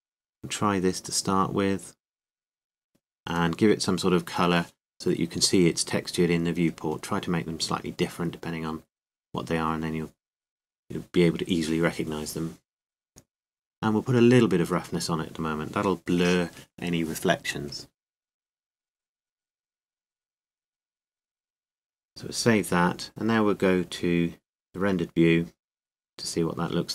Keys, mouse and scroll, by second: 4.5-12.3 drag, 15.4-17.0 drag, 17.0 right click, 19.1-21.1 middle drag, 22.4-24.2 drag.